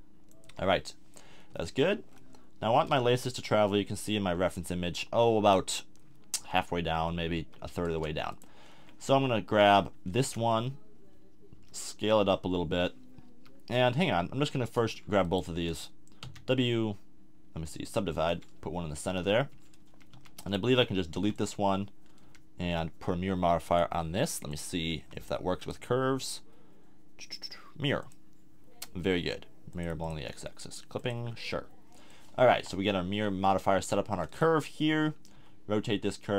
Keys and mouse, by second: 0.4 KP_1, 1.0-2.1 middle drag, 3.0 z, 7.4 z, 7.9 Tab, 11.6 s, 15.2 click, 16.2 w, 18.3 a, 19.1 Tab, 19.5 Tab, 19.9 a, 21.1 x, 22.2 a, 32.5 KP_1, 35.3 r.